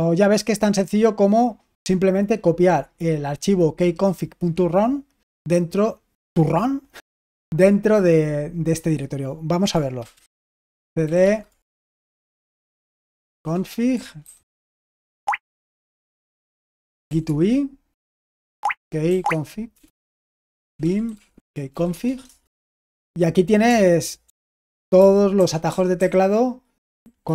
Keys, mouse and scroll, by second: 9.0-10.1 drag, 9.8-11.5 typing, 12.6-22.1 typing, 18.5 Tab, 20.3 Return, 24.4 ctrl+d, 24.9 ctrl+d, 25.3 ctrl+d, 25.6 ctrl+d, 25.9 ctrl+d, 27.2 ctrl+u.